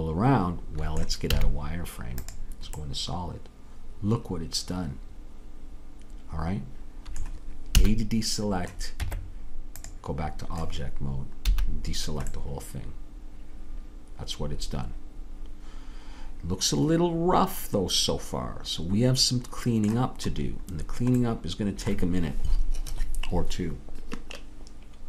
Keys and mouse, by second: 1.3 z, 2.8-4.7 middle drag, 7.8 a, 9.1 Tab, 11.6 a, 16.7-17.7 middle drag, 20.3-22.0 middle drag.